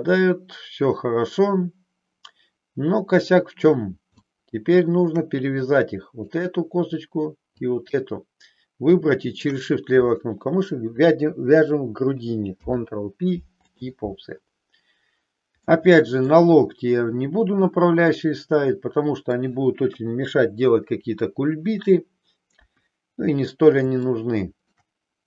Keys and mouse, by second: 4.2 shift+middle click, 5.6 click, 7.6 shift+click, 8.8 shift+click, 12.6 ctrl+p, 15.7 middle click, 17.7-19.4 middle drag, 19.9 KP_3, 24.0 shift+middle click.